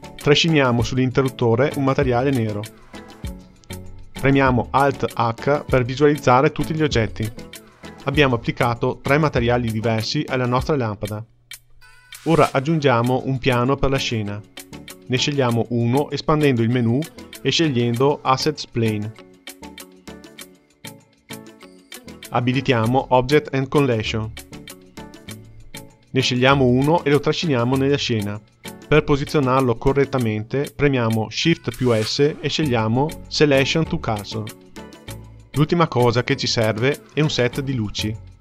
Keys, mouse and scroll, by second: 0.0-2.2 drag, 5.7 alt+h, 7.1-8.9 scroll down 6, 8.9 click, 18.9-22.0 drag, 22.6 click, 25.7-27.2 drag, 33.2 shift+s, 37.5-38.4 drag.